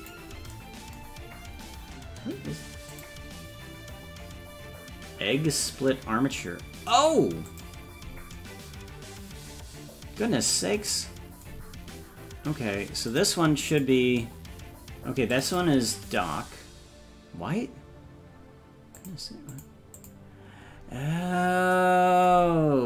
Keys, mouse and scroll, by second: 1.1-1.4 scroll down 1, 2.9 click, 2.9 scroll down 4, 13.2 click, 13.9 click, 15.4-19.1 drag, 19.6 click, 20.2 click, 21.2-21.8 scroll up 4.